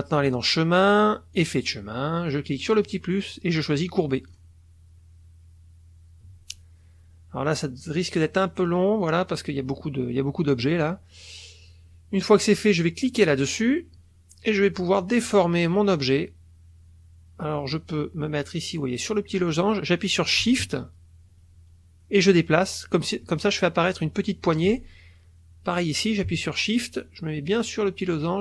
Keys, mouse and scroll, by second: 0.2 click, 1.3 click, 2.7 click, 4.3 click, 13.3 click, 20.5-24.8 shift+drag.